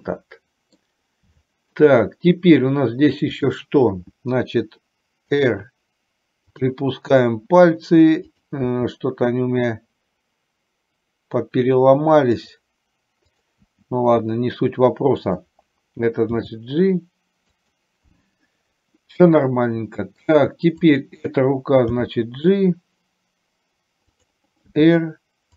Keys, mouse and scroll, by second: 1.4 shift+middle click, 3.4 click, 5.6 r, 8.6 click, 8.9 r, 13.4 click, 14.1 r, 16.6 g, 19.4 middle click, 22.2 g, 24.9 r.